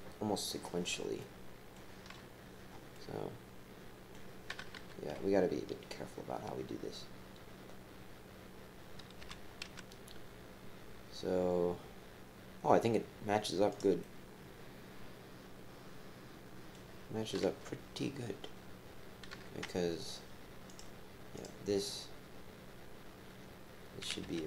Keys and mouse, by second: 1.2 click, 2.9-4.1 drag, 4.7 KP_3, 5.0 KP_1, 9.2 g, 14.0-15.8 drag, 16.7 right click, 17.4 KP_3, 19.3 KP_1, 20.7 click, 21.3 click, 24.2 g.